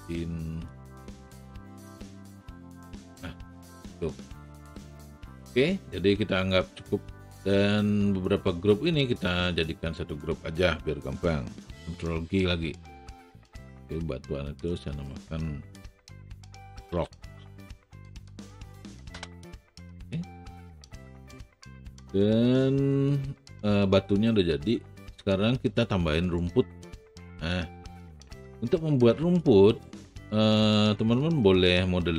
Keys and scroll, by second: 12.6 ctrl+g, 17.0 o, 18.2 c, 18.3 k, 18.7 s, 19.1 Return.